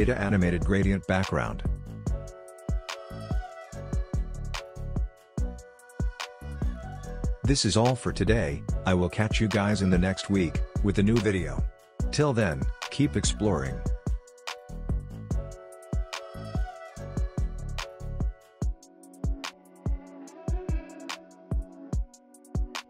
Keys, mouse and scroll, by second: 2.6-4.2 drag, 7.0 ctrl+z, 8.5-11.3 drag, 11.3-13.1 scroll up 1, 13.7 click.